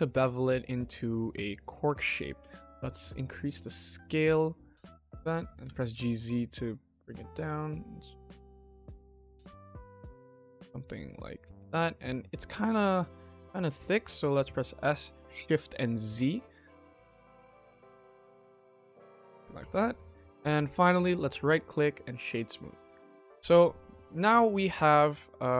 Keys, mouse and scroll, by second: 1.6 Tab, 2.3 s, 5.4 g, 7.3 s, 8.8 g, 9.5 s, 12.3-12.7 middle drag, 12.7-13.1 scroll down 2, 13.1-13.8 middle drag, 14.7 5, 19.0 KP_1, 19.5 click, 19.8 scroll up 1, 20.8 click, 21.2 click, 21.4 right click, 22.4-22.7 middle drag, 22.7 scroll down 1, 23.0 click, 23.3-23.7 scroll down 1, 23.7 click, 23.9 KP_1, 24.3 scroll down 1, 24.5 shift+middle drag, 25.0 scroll up 3, 25.2 middle click, 25.5 click.